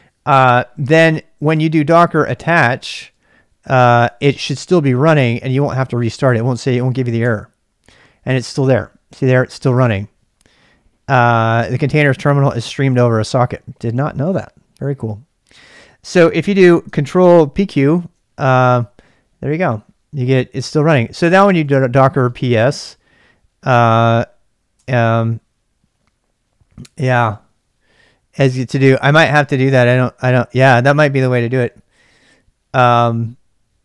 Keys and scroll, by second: 1.8-7.7 typing, 17.5 ctrl+p, 17.6 ctrl+q, 21.0-22.9 typing, 24.7 Return.